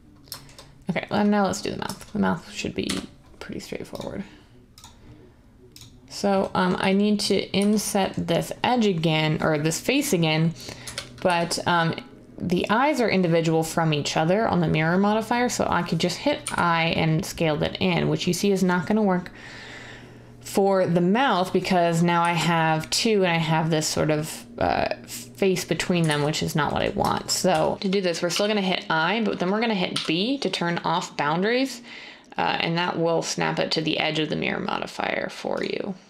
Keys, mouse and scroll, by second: 2.8 1, 7.5 z, 10.8-11.2 typing, 16.4 i, 22.2 z, 26.0 ctrl+z, 27.4 1, 28.2 i, 29.9 b.